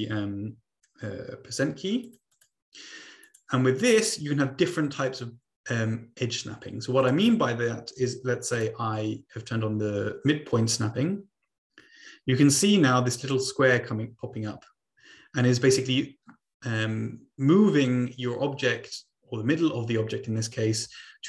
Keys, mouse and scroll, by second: 2.0-3.0 drag, 3.2 click, 7.0 ctrl+click, 7.9-8.4 ctrl+scroll up 2, 8.9-13.3 drag, 13.7-21.2 drag.